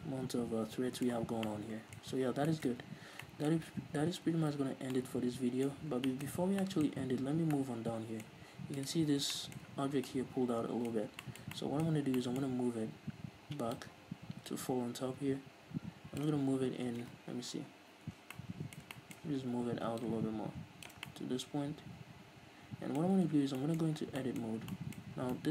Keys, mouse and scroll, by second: 1.5 scroll up 2, 1.7 scroll down 2, 2.4 Tab, 2.6 scroll down 2, 3.1 a, 3.4 scroll up 2, 4.1 ctrl+s, 5.1 ctrl+s, 6.1 scroll up 1, 6.6-7.0 scroll up 1, 7.3 scroll up 1, 7.7 scroll down 1, 9.2 right click, 9.7-14.1 shift+middle drag, 10.3 scroll down 2, 11.3-11.7 scroll up 2, 13.2-14.1 scroll up 2, 14.1 scroll up 1, 14.1-18.7 drag, 17.3 Tab, 17.7 a, 17.9 KP_Decimal, 18.5 Tab, 18.7-20.4 middle drag, 20.4-21.5 drag, 21.5-25.5 middle drag, 23.6 Tab, 24.2-25.1 scroll up 4.